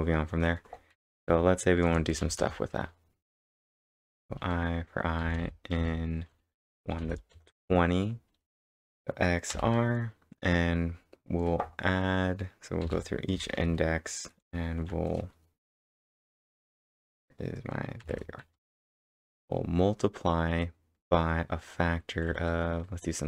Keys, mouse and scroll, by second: 1.0-2.7 typing, 4.3-9.5 typing, 12.8 Return, 12.8-13.6 typing, 18.0 shift+*, 18.5 =, 18.7 space.